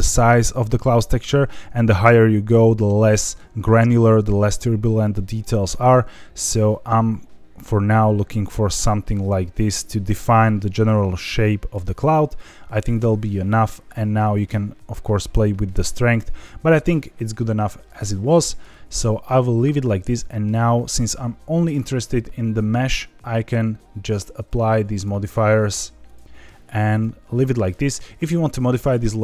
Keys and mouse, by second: 0.1-11.7 drag, 12.8 click, 13.8-16.6 drag, 17.9 ctrl+z, 24.2 click, 26.1 click.